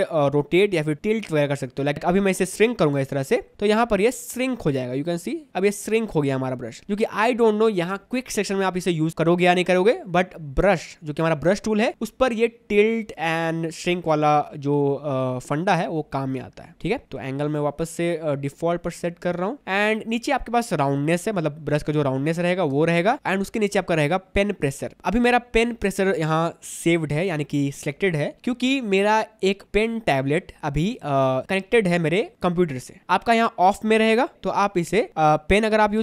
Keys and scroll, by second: 6.5 ctrl+z, 19.6 0.